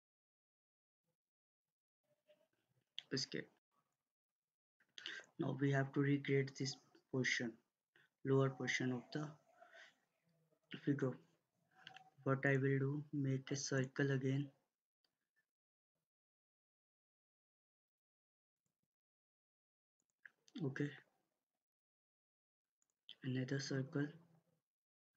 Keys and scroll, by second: 2.6 Escape.